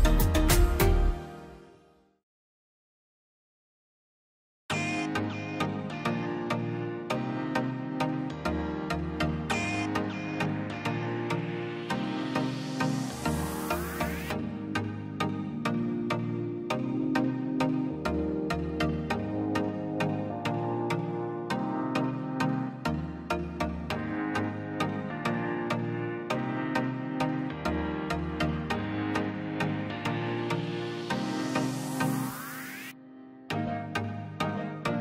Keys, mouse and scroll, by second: 1.2-2.1 scroll down 1, 2.5-3.2 scroll up 1, 3.2 click, 4.4-4.9 scroll down 1, 5.8 click, 8.2 scroll up 1, 9.6 click, 10.1 scroll down 1, 10.5 click, 11.4 space, 11.6 click, 11.8 scroll down 1, 12.1 click, 12.8 scroll down 1, 13.1 click, 13.6 l, 13.8-14.1 scroll up 1, 14.9 middle click, 15.3 scroll, 16.1 space, 16.2 click, 16.9 scroll down 1, 17.2 click, 17.6 Delete, 17.9 click, 18.1 Delete, 18.4-19.3 scroll down 1, 19.3 r, 20.6-21.9 drag, 21.9-22.4 scroll up 1, 22.9 middle click, 23.7 click, 24.1 scroll down 1, 24.4 middle click, 24.8-25.1 scroll up 1, 26.5 click, 28.0 scroll down 1, 30.2 click, 31.9 scroll up 1, 32.3 click, 32.7 scroll down 1, 33.2 space, 34.0 scroll down 1, 34.9 click.